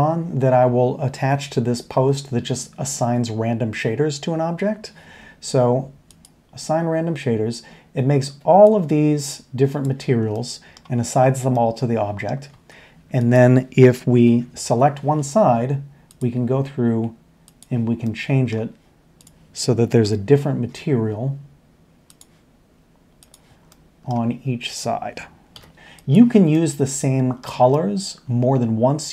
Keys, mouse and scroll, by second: 4.6 Tab, 10.3-10.7 middle drag, 10.8 middle click, 11.5 middle click, 11.7-12.4 middle drag, 12.5 Tab, 14.1 l, 18.0-18.5 middle drag, 20.0 l, 23.7 middle drag, 25.5 l, 26.5 middle click.